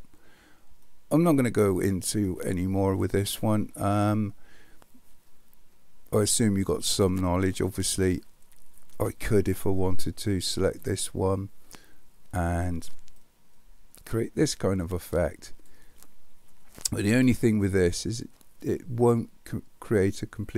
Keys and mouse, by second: 0.8-1.8 middle drag, 10.7 click, 13.3-15.7 drag, 17.4-18.2 middle drag, 19.2-20.5 middle drag.